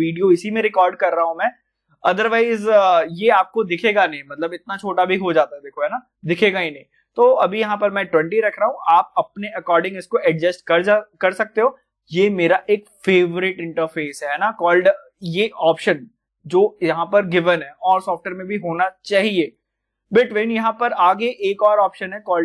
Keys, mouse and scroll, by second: 4.5 click.